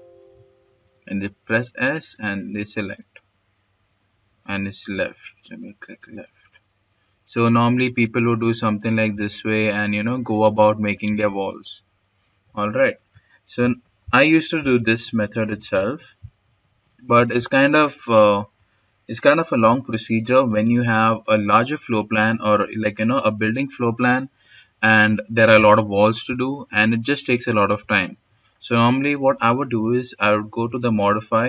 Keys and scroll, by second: 2.2-2.9 typing, 2.9 Escape, 7.9 Escape, 9.9 Escape, 13.3 s, 16.1 Delete, 16.6 Escape, 18.4 Delete.